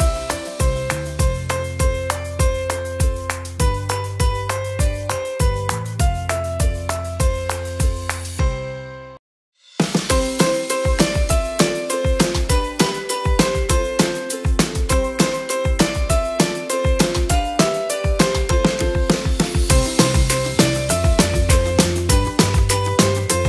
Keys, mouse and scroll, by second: 13.5-13.9 typing, 15.2 Tab, 15.5-16.0 typing.